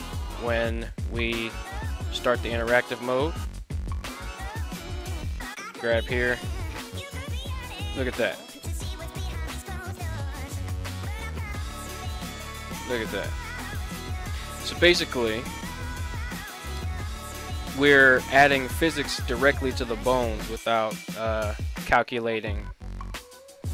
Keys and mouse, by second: 2.2 click, 5.0 right click, 6.0 g, 13.8 right click, 15.1-16.1 middle drag, 16.8 middle click, 17.5 middle click, 18.1 middle click, 18.9 g.